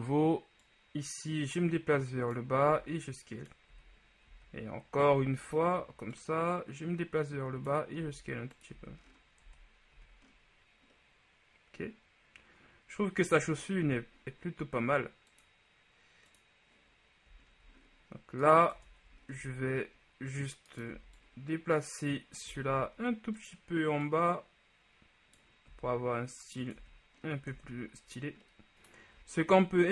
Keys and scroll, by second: 2.9 s, 3.8 z, 4.4 z, 5.2 e, 8.2 s, 8.9 z, 9.6 Tab, 10.1 a, 13.6 KP_1, 18.8 Tab, 19.6 z, 21.0 b, 22.6 s, 22.8 z, 26.0 s, 26.9 z, 27.6 Tab.